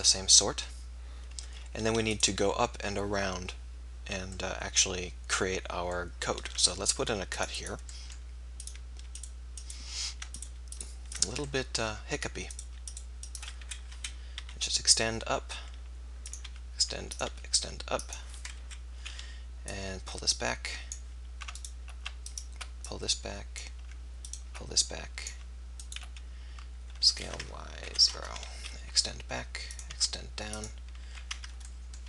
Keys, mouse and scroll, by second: 2.2 click, 2.5-3.9 right drag, 6.6 ctrl+r, 8.7-9.7 drag, 9.7-11.5 right drag, 11.5-14.0 middle drag, 14.0 KP_1, 14.4 e, 16.6 e, 17.3 e, 18.6 KP_3, 22.1 right click, 22.9-27.2 drag, 27.2 s, 28.8 e, 29.8 e, 31.2-32.0 drag.